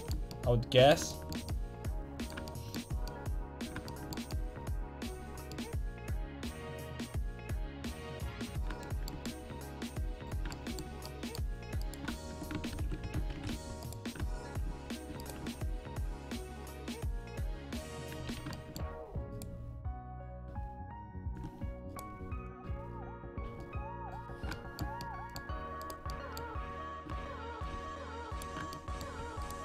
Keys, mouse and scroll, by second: 4.7 middle click, 5.0 middle click, 11.8 right click, 12.7 ctrl+x, 13.0 a, 13.3 ctrl+t, 13.5 a, 13.8 right click, 17.0-18.3 drag, 18.3 a, 21.3 click, 21.5 a, 23.4 a, 23.6 click, 23.6-24.6 right drag, 24.6-25.8 middle drag, 25.8-28.3 right drag, 27.0 click, 27.7 a, 29.2-29.6 right drag, 29.2 a.